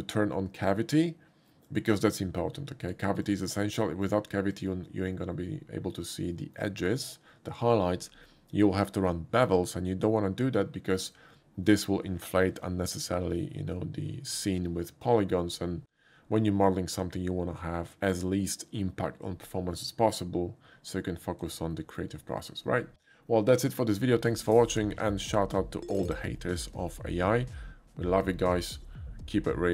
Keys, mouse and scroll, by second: 1.7 click, 2.1 click, 2.9 click, 3.3 click, 4.1 click, 4.6 click, 6.4 middle click, 21.8 shift+middle click, 22.4 shift+middle click.